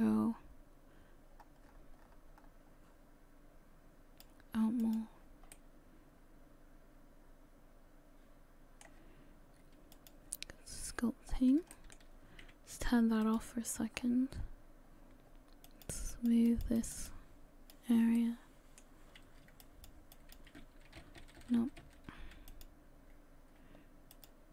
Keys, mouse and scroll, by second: 4.8 click, 5.5 middle click, 8.4 middle click.